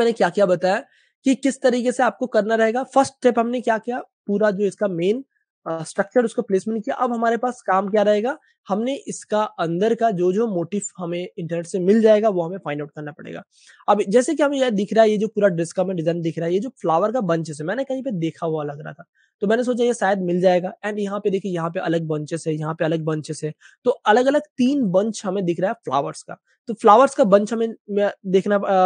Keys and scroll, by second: 1.8 space, 3.3 super+space, 3.4 super+space, 3.7 v, 5.4-6.4 typing, 6.7 super+space, 6.8 super+space, 8.5 space, 8.6 space, 8.6 space, 15.4 super+space, 21.1 space, 22.7 space, 22.8 space, 26.3 super+space, 26.4 super+space.